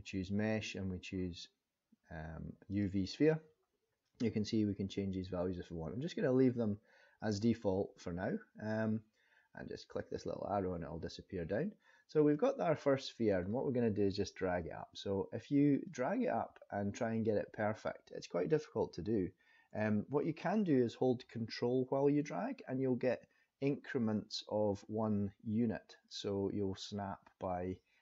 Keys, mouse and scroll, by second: 10.1 click, 11.4-12.3 scroll up 1, 12.3 middle click, 15.8 click, 19.7 ctrl+z, 22.5 ctrl+click.